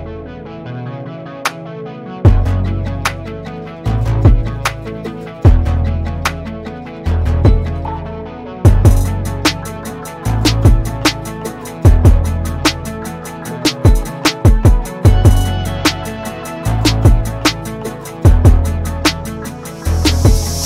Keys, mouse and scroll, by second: 0.8 alt+z, 1.2 click, 2.3-2.8 scroll down 2, 2.8 Tab, 2.9-3.2 middle drag, 3.2 Tab, 4.6 KP_1, 5.5-6.5 shift+middle drag, 6.5 Tab, 7.1 click, 11.7 Tab, 12.3 click, 13.2 alt+z, 14.5-14.8 scroll down 3, 14.8-16.6 middle drag, 16.6-17.1 scroll up 3, 17.1 scroll down 1, 17.3 middle click, 18.0 KP_1, 18.8-19.2 scroll down 1, 19.2-20.6 shift+middle drag.